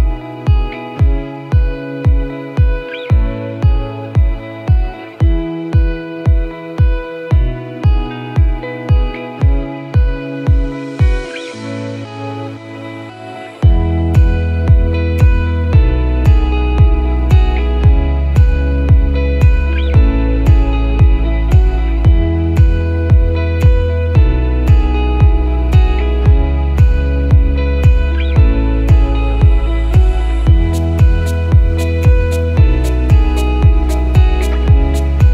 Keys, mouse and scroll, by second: 2.9 alt+click, 3.6 s, 5.8 alt+click, 6.3 s, 8.9 alt+click, 9.3 s, 13.8 ctrl+r, 14.9 s, 18.3 click, 19.0 click, 23.0 alt+click, 23.9 KP_7, 26.4 KP_9, 27.4 KP_9, 28.0 KP_7, 28.4 KP_9, 31.1 e.